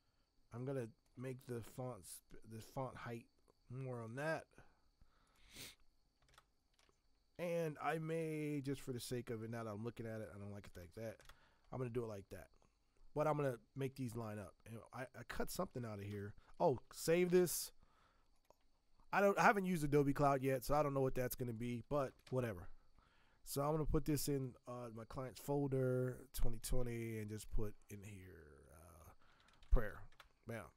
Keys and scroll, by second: 6.3 ctrl+Return, 6.8 v, 8.2 t, 10.8 shift+Return, 16.1 v, 17.1 ctrl+s, 21.8-22.7 typing, 29.0-30.3 typing.